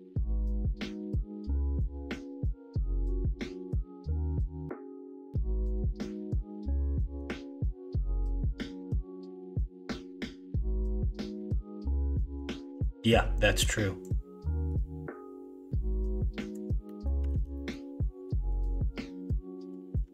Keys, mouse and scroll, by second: 5.4 middle click, 6.1 shift+middle click, 6.7 middle click, 12.1 middle click, 15.7 click, 16.8 scroll up 1, 16.9 middle click, 17.3 alt+z, 17.5 scroll up 1, 17.6 middle click, 18.8-20.1 drag.